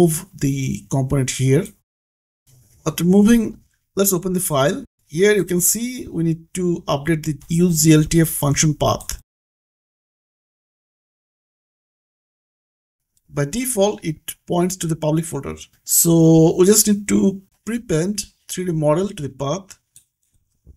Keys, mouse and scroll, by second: 0.2 click, 2.8-3.1 scroll up 1, 5.1 click, 7.4 click, 9.4-10.0 scroll up 1, 13.0 click, 16.9 click, 19.6-20.7 typing.